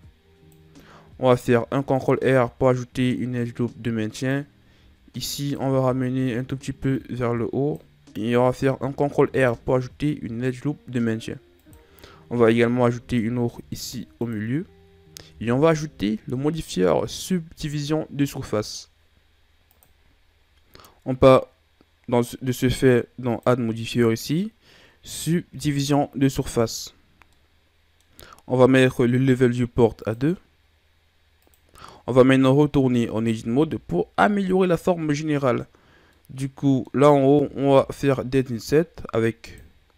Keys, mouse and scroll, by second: 1.5 ctrl+r, 5.2 alt+right click, 6.8 click, 8.8 ctrl+r, 12.7 ctrl+r, 15.1 Tab, 23.3 click, 27.4-30.1 middle drag, 30.1 click, 32.5 middle click, 33.1 scroll up 1, 33.4 Tab, 36.2-37.8 middle drag, 37.8 ctrl+Tab.